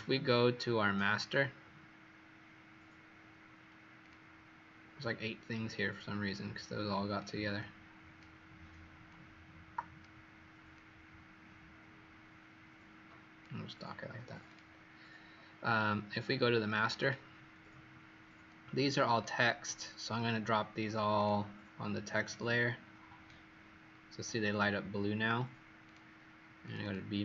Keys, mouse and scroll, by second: 16.9 click, 18.6 alt+scroll down 1, 19.1 click, 21.1 click, 26.8 click.